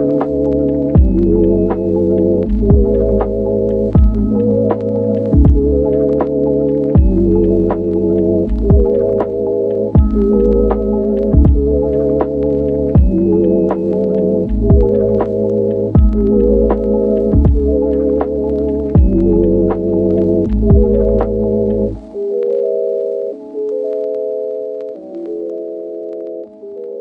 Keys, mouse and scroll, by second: 0.0 g, 0.2 x, 0.3 click, 1.3 g, 1.5 x, 2.3 g, 2.5 x, 4.4 ctrl+r, 4.6 ctrl+click, 4.7 ctrl+r, 5.3 KP_1, 5.7 ctrl+r, 7.2 g, 7.3 g, 7.7 click, 8.3 middle click, 8.5 KP_1, 9.1 shift+a, 9.8 s, 10.1 click, 11.1-14.8 typing, 11.3 click, 15.2 click, 15.9 Tab, 18.6 ctrl+r, 18.8 ctrl+r, 19.1 ctrl+r, 19.8 click, 20.1 click, 23.0 e, 25.2 ctrl+r, 26.4 g.